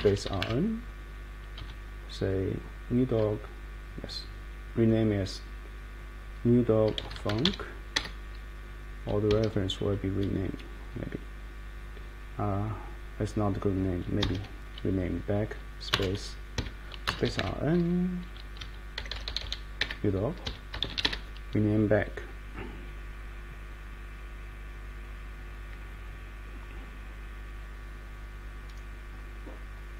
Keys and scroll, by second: 0.0-1.6 typing, 6.7-7.9 typing, 9.3 Escape, 9.4 Escape, 14.2 Escape, 14.3 Escape, 15.9 space, 16.5 Escape, 17.0-18.9 typing, 19.8 Return, 20.4 Escape, 20.6-21.5 typing.